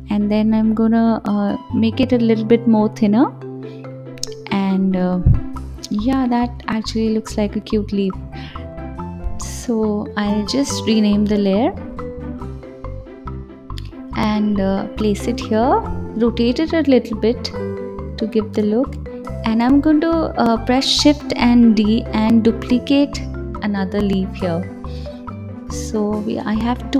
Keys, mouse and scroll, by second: 0.0 ctrl+z, 0.3-1.5 middle drag, 1.5 click, 3.2 KP_1, 4.7 click, 6.2 g, 8.0-9.4 drag, 9.5-12.5 drag, 12.6 s, 14.1 g, 15.4 r, 18.5 shift+f, 19.6 shift+d, 20.7 r, 22.0 s, 22.7 g, 23.6 KP_7, 24.9 KP_1, 26.0-26.9 middle drag.